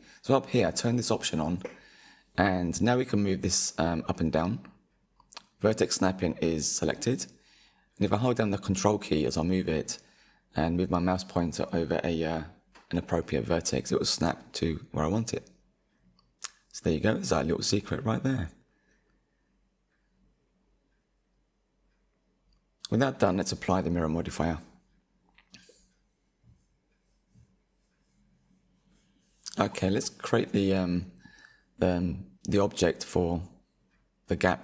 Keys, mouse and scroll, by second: 3.3-6.0 drag, 10.5-11.4 drag, 11.9-14.9 drag, 17.4-19.0 drag, 19.3-20.0 middle drag, 20.0 click, 21.7-23.8 drag, 23.8-24.7 middle drag, 24.7 click, 25.0-25.8 shift+middle drag, 25.8 KP_1, 26.2-27.4 middle drag, 27.4 Tab, 27.9 shift+middle click, 28.6-29.0 scroll up 4, 29.3-30.6 middle drag, 30.6-32.0 drag, 33.4-33.9 scroll down 2, 33.9-34.6 shift+middle drag.